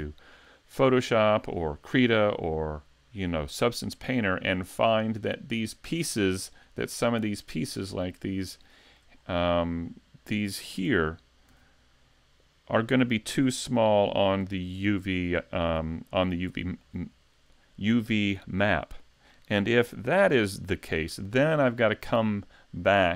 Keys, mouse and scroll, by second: 8.2 right click, 8.6 shift+middle click, 9.1 scroll up 3, 9.6-10.8 scroll down 1, 10.8 Tab, 10.8-11.4 scroll down 1, 11.5 a, 14.5 l, 15.4 scroll up 2, 15.9 scroll down 1, 16.3 shift+middle click, 18.6 l, 20.2 l, 21.2-21.6 scroll down 2, 22.0-22.6 scroll up 2, 22.6-23.1 scroll down 1.